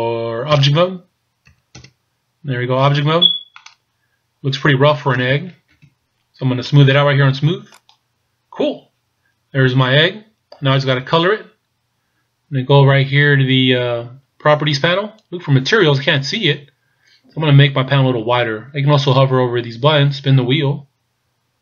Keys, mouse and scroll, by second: 1.9 Tab, 3.6 middle click, 5.7 KP_1, 7.8 click, 9.8 scroll down 1, 19.8-21.3 scroll down 2, 21.3-21.6 scroll up 6.